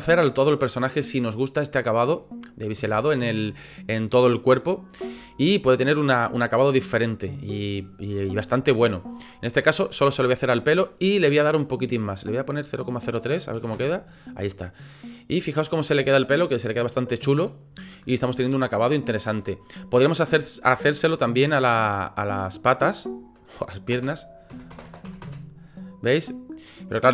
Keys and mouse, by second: 1.0-1.6 middle drag, 2.1 middle drag, 3.0-3.3 shift+middle drag, 5.1 shift+middle drag, 5.5-6.7 middle drag, 11.7-14.3 drag, 14.9 click, 15.4-17.4 middle drag, 18.0-19.1 middle drag, 22.4-25.9 drag, 24.8 KP_0, 26.2 click, 27.0 click.